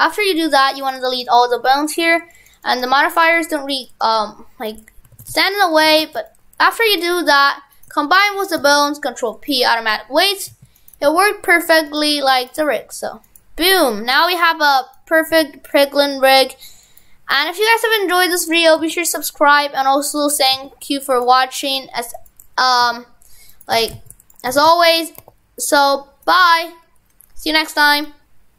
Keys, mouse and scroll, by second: 0.7 click, 0.8-5.0 click, 5.2 shift+f, 6.0 shift+f, 6.7 Tab, 7.8 shift+right click, 8.6 ctrl+p, 10.5 ctrl+Tab, 10.8 right click, 11.1 r, 15.0 right click, 15.3 r, 17.0 right click, 17.3 r, 18.7 right click, 18.8 r, 22.2 right click, 22.8 r, 23.8 shift+f, 24.6 shift+f, 25.2 r.